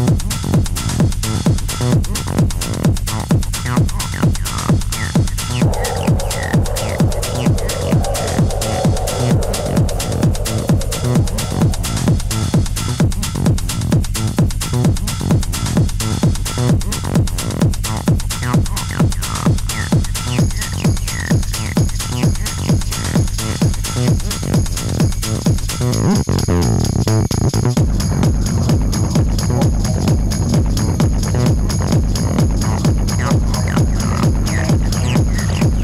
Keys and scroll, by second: 4.2 ctrl+d, 4.4 Escape, 9.9 4, 25.3 shift+i, 25.9 3, 27.9 ctrl+F1, 28.0 ctrl+F2, 28.1 ctrl+F3.